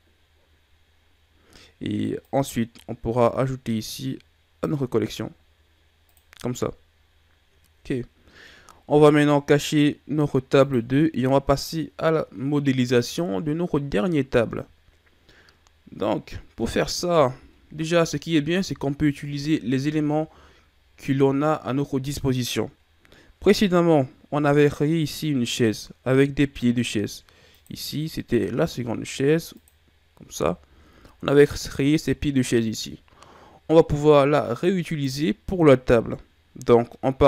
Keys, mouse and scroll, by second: 2.1 click, 6.0 click, 7.4-9.7 middle drag, 10.6 click, 12.9 click, 27.4 click, 29.5 click, 30.5-30.8 shift+scroll down 2, 30.8-31.4 scroll up 5, 31.4-31.9 ctrl+scroll down 5, 31.9-34.4 scroll up 2, 34.8 right click.